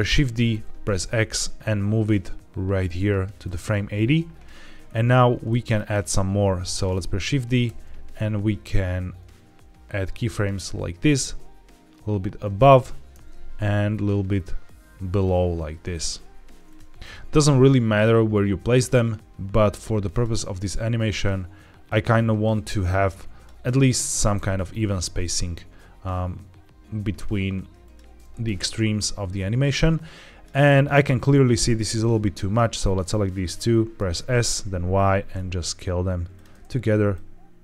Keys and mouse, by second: 0.0 shift+d, 0.4 x, 5.5 shift+middle click, 7.6 shift+d, 13.0 shift+d, 16.5 click, 16.9 g, 21.0-21.7 drag, 21.8-23.3 drag, 23.7 click, 24.0 g, 24.2 x, 27.7-30.3 drag, 30.9-32.4 drag, 32.4-33.6 middle drag, 33.9 s, 34.0 s, 34.4 y, 36.2-37.6 drag.